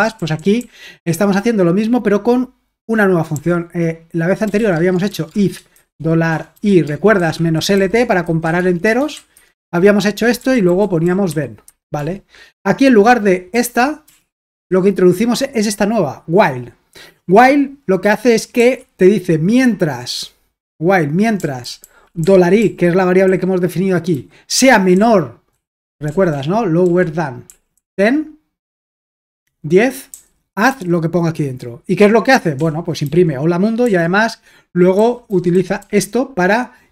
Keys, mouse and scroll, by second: 0.0-0.8 typing, 3.3-9.0 typing, 9.3 Escape, 10.1-12.0 typing, 13.5-14.5 typing, 18.6 typing, 21.4-27.7 typing, 30.1-30.7 typing, 32.6-33.8 typing, 34.9-35.8 typing.